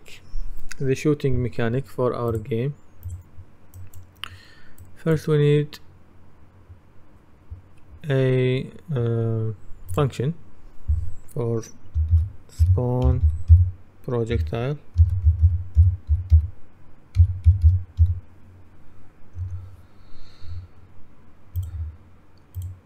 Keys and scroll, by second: 12.5-18.6 typing, 19.5 Return.